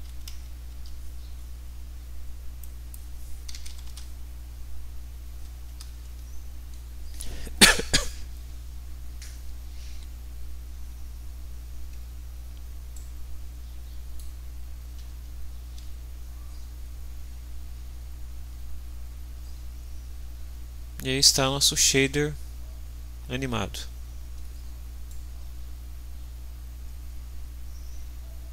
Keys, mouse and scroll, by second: 0.0-0.8 typing, 2.6 click, 3.3-4.2 typing, 5.6 Return, 12.9-14.3 middle drag, 14.9 ctrl+s, 25.1-28.5 drag.